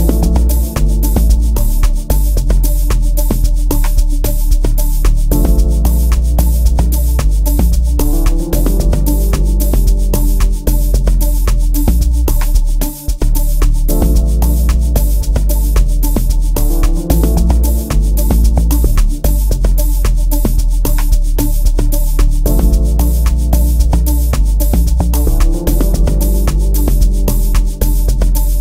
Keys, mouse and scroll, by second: 10.3 click, 10.9 F1, 11.5 F1, 28.3 F1.